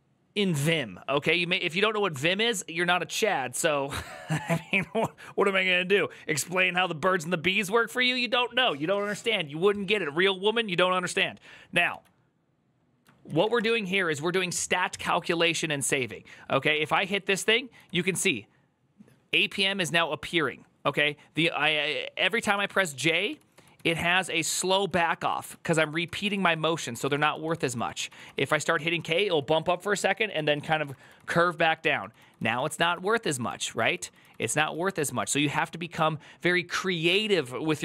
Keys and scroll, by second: 13.2-14.0 typing, 15.5-18.7 typing, 23.1-28.3 j, 28.3 k, 29.8-30.9 k, 35.0 k.